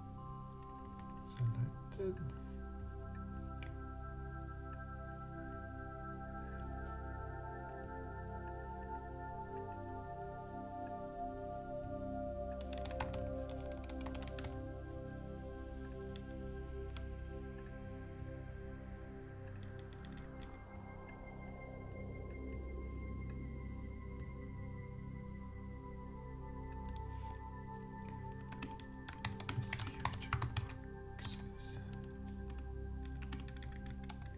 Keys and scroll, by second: 12.6-14.9 typing, 28.8-29.7 typing.